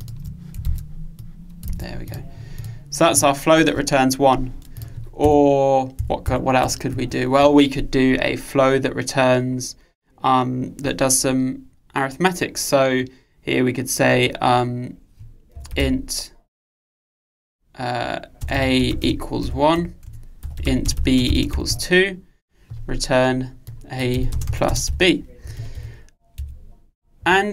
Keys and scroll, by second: 0.8 super+c, 1.7 super+v, 26.5 Escape.